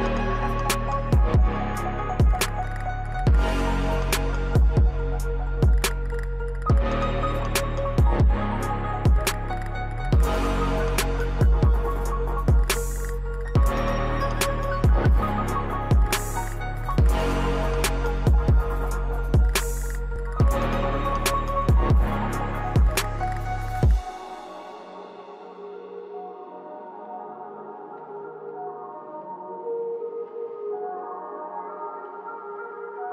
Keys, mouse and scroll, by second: 0.8-6.0 drag, 5.6 typing, 16.1 click, 16.8 right click, 17.8 click, 20.5 g, 21.5-30.9 drag, 21.8 typing, 24.1 typing, 30.9-31.4 scroll up 1, 31.9-33.1 drag.